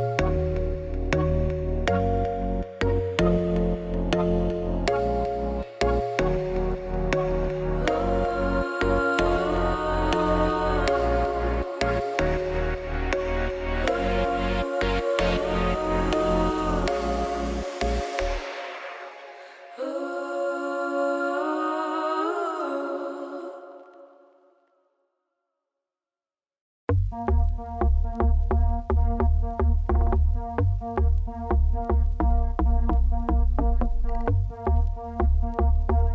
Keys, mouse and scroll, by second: 1.2 KP_1, 1.5 shift+middle click, 1.7 scroll up 3, 2.0 alt+d, 4.7 s, 4.8 middle click, 5.0 scroll down 2, 5.3 middle click, 6.2-7.3 drag, 7.8 middle click, 8.0 scroll down 3, 8.3 KP_0, 8.7 z, 9.1 z, 13.0 z, 13.8-15.2 shift+drag, 15.2 middle click, 15.5 scroll up 10, 16.3 alt+d, 17.4-18.6 shift+drag, 19.4 click, 19.8 g, 20.5 scroll down 3, 20.8 middle click, 21.0 click, 21.3 KP_0, 21.9 z, 23.2 click, 23.6 h, 24.8 ctrl+s, 25.6 scroll down 2, 25.8 scroll up 2, 26.4 click, 26.8-31.6 drag, 31.6 scroll down 1, 32.0 scroll up 2, 33.0 click, 33.7 click.